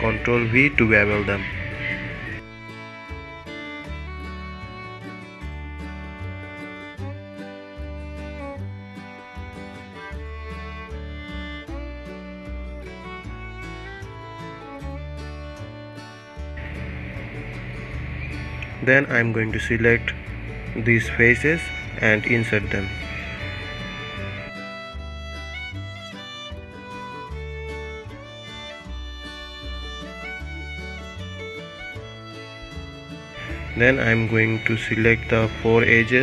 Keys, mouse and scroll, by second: 0.7 shift+click, 1.2-2.5 middle drag, 2.5-2.9 scroll down 1, 2.9-5.5 middle drag, 5.5 ctrl+b, 14.2-14.8 scroll up 2, 14.8-16.0 middle drag, 16.0-16.4 scroll up 1, 16.4 Tab, 17.4 Tab, 18.8 3, 19.2 click, 20.6 i, 27.2-28.7 middle drag, 28.7-29.1 scroll up 1, 29.1-30.8 middle drag, 34.9 click, 35.8 shift+click.